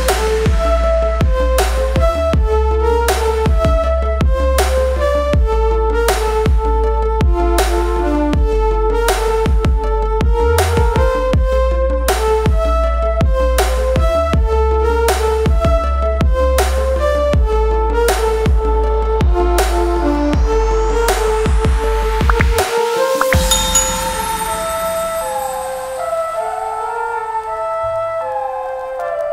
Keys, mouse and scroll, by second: 0.2 space, 0.7 click, 5.5 Up, 5.7 space, 5.8 click, 6.2 click, 7.6 space, 8.2 click, 9.5 click, 11.5 click, 12.0 click, 16.0 space, 16.0 click, 16.1 space, 16.6 click, 18.4 click, 18.8 space, 18.9 click, 19.0 space, 19.5 click, 20.2 ctrl+z, 20.6 click, 22.7-23.2 scroll down 1, 23.2 click, 25.5 click, 27.8 click.